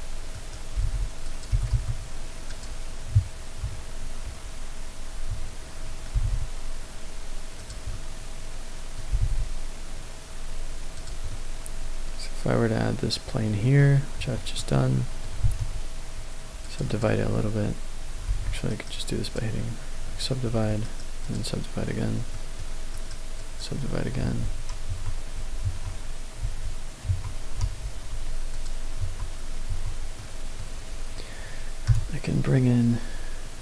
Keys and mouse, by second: 0.3 right click, 0.6 g, 1.2 click, 1.5 g, 1.7 y, 2.4 click, 3.6 KP_Decimal, 4.1 KP_1, 6.1 g, 6.1 z, 7.5 click, 7.9-9.0 middle drag, 9.1 g, 9.2 z, 10.9 click, 11.3-13.8 middle drag, 14.1 Tab, 14.5 middle click, 15.4 ctrl+r, 16.8 click, 18.3 ctrl+z, 18.7 right click, 20.0 Tab, 20.5 Tab, 20.8 right click, 22.3 middle click, 22.9 right click, 24.2 ctrl+a, 24.9 Tab, 25.6 Tab, 26.4 ctrl+a, 27.1 Tab, 27.6 ctrl+a, 29.0 Tab, 29.7 Tab, 30.2-30.6 middle drag, 31.8 n.